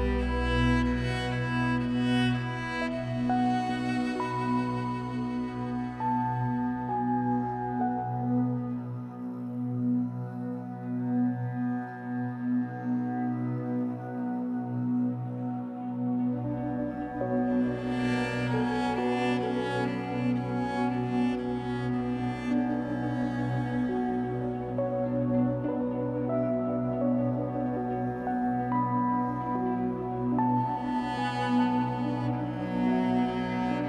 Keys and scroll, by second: 0.6 shift+w, 1.4 Escape, 3.3 3, 5.8 l, 6.9 shift+w, 7.5 Escape, 8.5 Escape, 10.4 l, 11.3 shift+w, 13.0 Escape, 15.1 3, 16.0 shift+Tab, 20.1 w, 23.4 r, 26.6 Escape, 26.8 3, 27.7 shift+Tab, 28.2 Escape, 32.3 shift+Tab, 33.3 3.